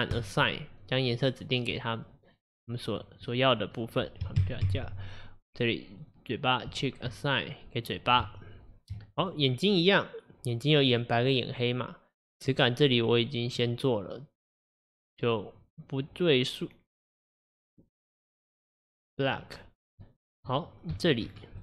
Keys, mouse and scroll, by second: 0.2-1.3 drag, 1.8-3.0 middle drag, 3.0 click, 3.3-4.4 middle drag, 4.4 ctrl+KP_Add, 4.7 ctrl+KP_Add, 6.0 click, 6.8 click, 7.1-9.0 middle drag, 9.0 Tab, 9.2 click, 11.0-12.6 drag, 15.7-17.3 drag, 19.3 click, 20.6-21.2 middle drag, 21.2-21.6 shift+scroll up 1.